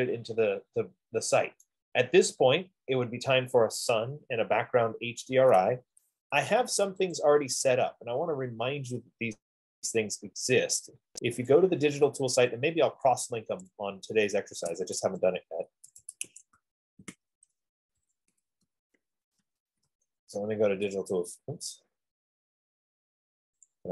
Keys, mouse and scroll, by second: 1.8 right click, 4.6-6.9 right drag, 7.6 click, 11.9 click, 14.9-20.5 typing, 15.6-16.7 drag, 20.5 Return, 22.3 typing.